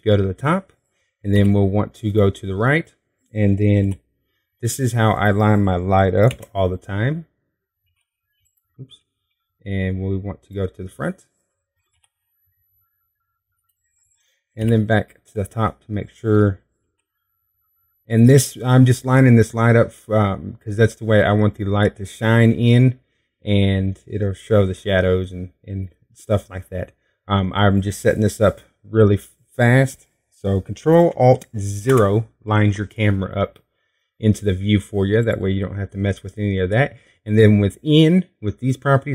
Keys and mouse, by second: 3.2 q, 5.6 r, 8.1 Tab, 10.7 q, 13.7 r, 16.4 q, 18.6 r, 25.1 click, 25.3 middle click, 28.4 middle click, 30.6-33.5 middle drag, 33.6 ctrl+alt+KP_0, 37.0-39.0 drag.